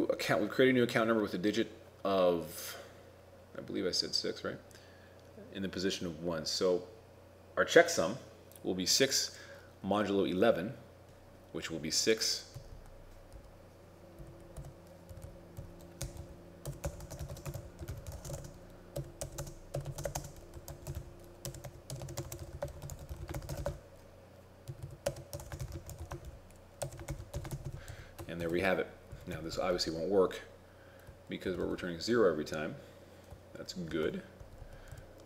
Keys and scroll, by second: 22.3 shift+a, 23.4 shift+9, 25.6 shift+i, 27.2 shift+9, 27.6 shift+0, 28.5 ctrl+shift+s, 31.6 ctrl+r, 31.7 ctrl+r, 34.0 ctrl+Tab, 34.5 ctrl+Left, 34.7 ctrl+Down, 35.0 ctrl+Right.